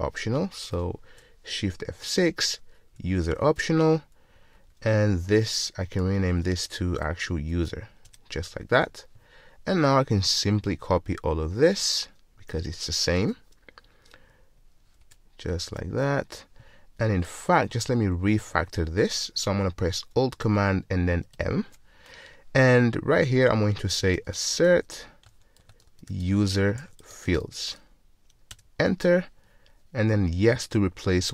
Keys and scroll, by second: 0.8 shift+F6, 3.3 Return, 6.1 super+w, 7.4 alt+super+v, 13.2 super+c, 15.9 super+v.